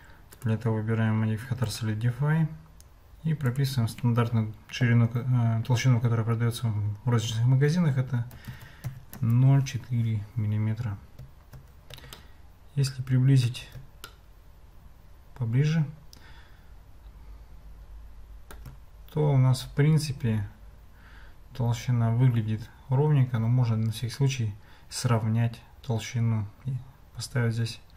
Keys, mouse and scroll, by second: 0.3-1.8 drag, 3.6-9.9 drag, 12.3-13.5 ctrl+middle drag, 14.1-18.6 shift+middle drag.